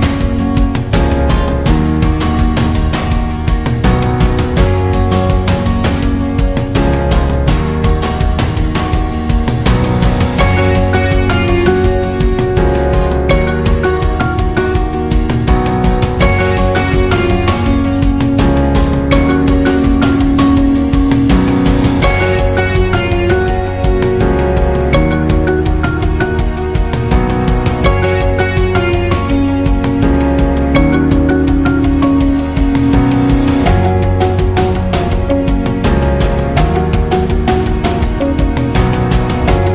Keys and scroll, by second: 12.0-12.8 space, 13.9 ctrl+z, 18.2 ctrl+z, 26.1-27.4 space.